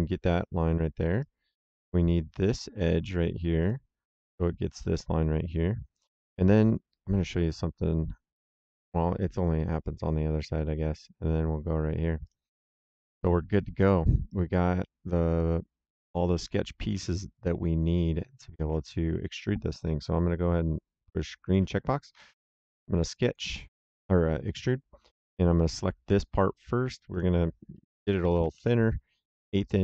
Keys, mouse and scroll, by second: 0.7 middle click, 1.1 right click, 3.5 click, 6.0 middle click, 6.4 right click, 12.1 click, 13.1 middle click, 14.2 right click, 18.5 middle click, 21.4 click, 22.0 s, 23.2 click, 25.2 click, 27.0 click, 28.0 KP_1, 28.2 KP_2, 28.3 KP_5, 28.5 Return.